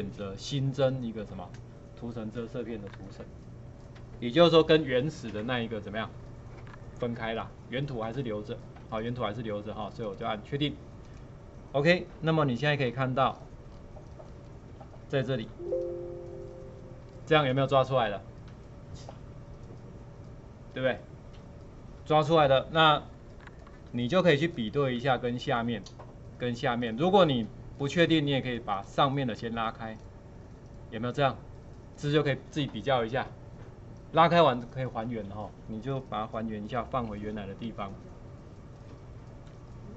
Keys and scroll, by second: 15.4 space, 37.6 ctrl+z.